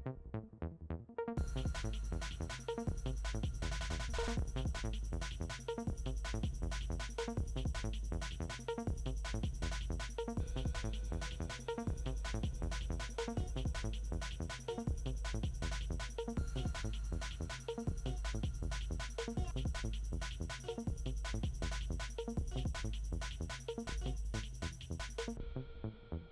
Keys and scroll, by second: 14.0 t.